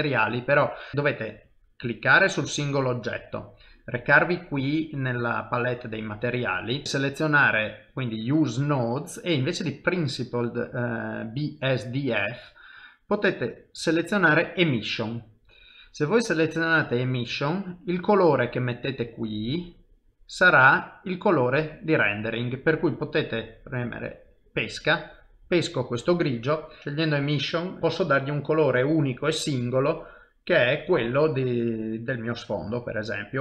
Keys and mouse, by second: 0.9 click, 6.9 click, 17.7 click, 22.9 click, 26.6 middle click, 26.8 shift+middle click, 27.8 F12, 32.2 ctrl+middle click.